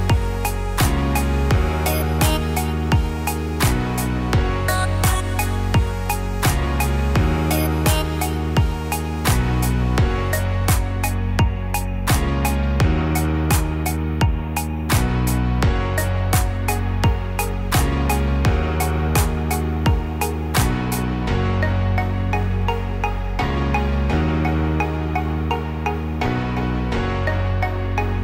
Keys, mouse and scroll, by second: 4.8 ctrl+r, 9.2 ctrl+r, 13.4 middle click, 15.2 ctrl+r, 18.3 middle click, 20.1-20.7 scroll down 2, 20.4 middle click, 21.1 Tab, 21.7-22.8 scroll down 2, 22.1-22.8 scroll up 1, 22.8 Tab, 22.8 scroll up 1, 23.4 middle click, 23.9 scroll up 2, 24.7-25.1 scroll up 1, 25.6 ctrl+r.